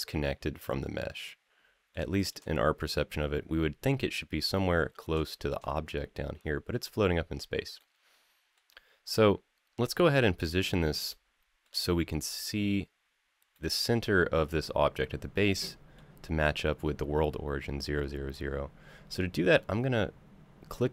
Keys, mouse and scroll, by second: 1.0-1.7 middle drag, 1.9 shift+middle drag, 2.3-4.1 scroll up 1, 4.3-4.9 middle drag, 5.1 shift+middle drag, 5.6 middle drag, 7.6 middle click, 10.9 middle click, 13.3-13.7 middle drag, 15.1-15.7 middle drag.